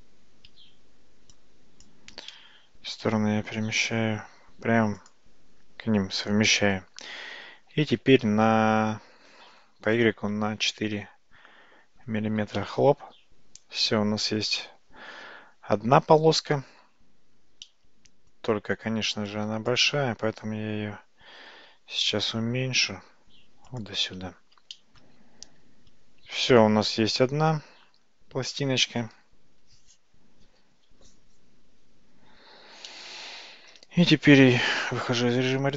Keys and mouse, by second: 1.4 shift+click, 5.0 g, 7.8 g, 14.6-16.6 middle drag, 17.7 middle click, 19.3 click, 21.6 g, 24.8 shift+middle click, 26.5-28.6 middle drag, 32.9 middle click, 35.2 Tab.